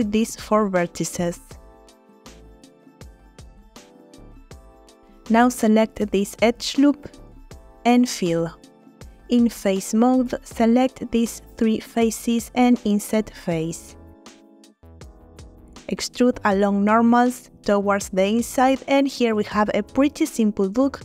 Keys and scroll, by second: 4.4 f, 7.7 f, 9.6 3.